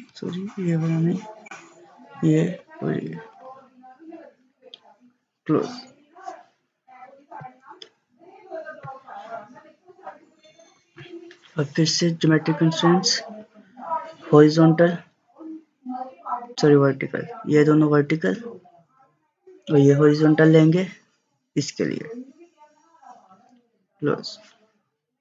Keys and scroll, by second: 0.1 ctrl+z, 10.8 ctrl+z.